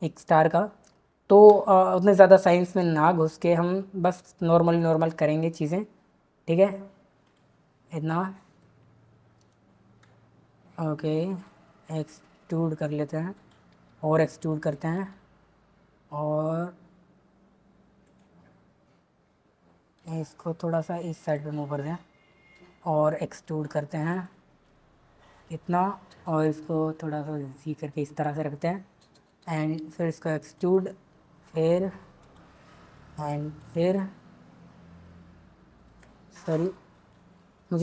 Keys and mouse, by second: 4.5 e, 7.2 click, 11.2 e, 13.3 click, 13.7 e, 14.5 click, 14.9 e, 20.1 g, 22.7 e, 24.1 click, 26.6 g, 29.5 e, 30.9-34.1 typing, 32.2 click, 33.5 click, 36.6 ctrl+z, 37.2 ctrl+z.